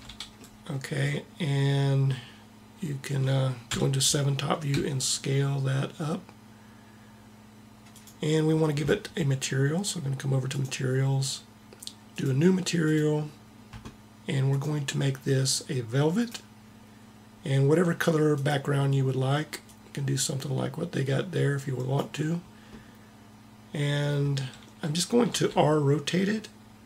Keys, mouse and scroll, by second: 3.7 KP_7, 4.8 s, 10.5-16.3 drag, 18.3-20.1 drag, 25.2 r.